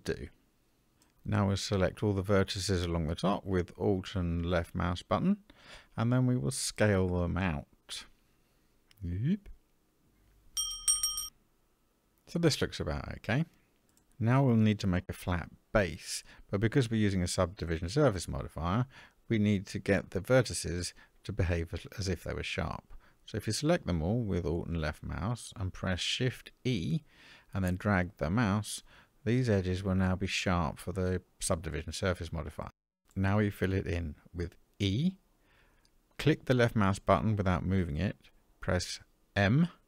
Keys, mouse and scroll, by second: 2.1 click, 5.6 alt+click, 7.4 s, 13.9 middle click, 15.1 Tab, 15.9-17.1 middle drag, 15.9-16.8 scroll up 1, 18.0 Tab, 18.5 middle click, 19.5-20.1 scroll up 4, 22.5 alt+click, 26.7 shift+e, 34.2 e, 39.3 m.